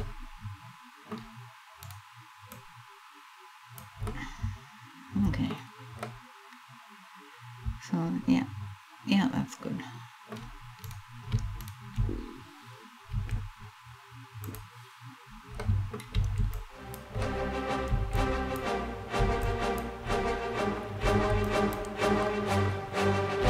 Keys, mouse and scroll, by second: 1.6 right click, 2.1 click, 3.7 middle click, 5.2-5.7 scroll down 2, 5.7 middle click, 10.5 right click, 11.2 shift+right click, 12.7 s, 14.1 click, 15.2 middle click, 15.7 b, 16.9 middle click, 17.6 b, 18.9 b, 19.8 middle click, 20.7 b, 21.9 middle click, 23.2 s.